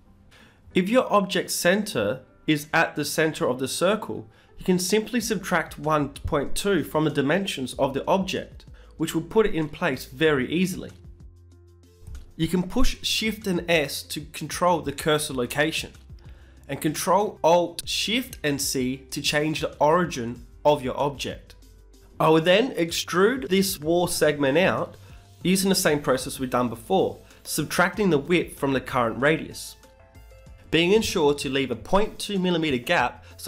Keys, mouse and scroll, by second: 4.8-6.7 drag, 10.9-12.9 middle drag, 13.0 KP_Subtract, 14.9-16.8 drag, 18.9 Tab, 19.7-22.1 right drag, 20.6 e, 21.2 g, 26.1 Tab, 27.7 Tab, 28.1 g.